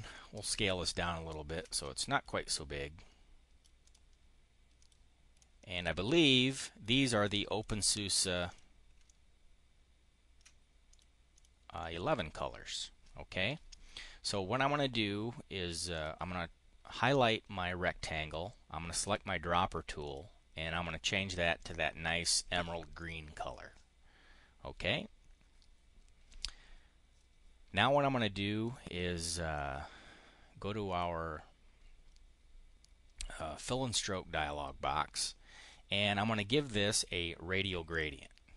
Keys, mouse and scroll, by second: 0.0-1.5 ctrl+drag, 1.5 click, 2.1-3.5 drag, 3.7 click, 4.6 click, 5.2 click, 6.4 right click, 7.3 click, 8.2 click, 8.9-10.4 ctrl+drag, 10.7 click, 11.2 click, 11.5 click, 15.7 click, 18.8 click, 19.8 click, 21.1 click, 21.4 click, 22.8 middle click, 28.4 click, 30.8 click, 33.2-35.1 drag, 37.7 click.